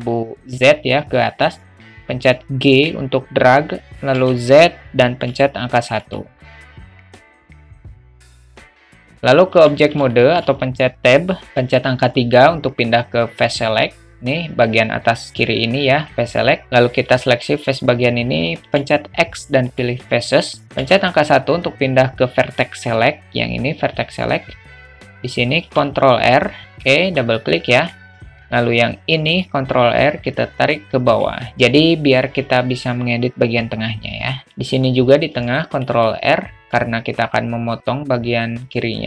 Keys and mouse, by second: 2.7 g, 6.3-6.6 alt+middle drag, 7.0 middle drag, 7.9-8.7 drag, 8.9 alt+middle click, 9.5 Tab, 10.1 alt+shift+middle click, 11.6 3, 18.9 x, 20.8 1, 25.6 ctrl+r, 27.4 alt+middle click, 28.7 ctrl+r, 28.9 ctrl+r, 32.0 alt+middle click, 32.3 middle click, 35.4 ctrl+r.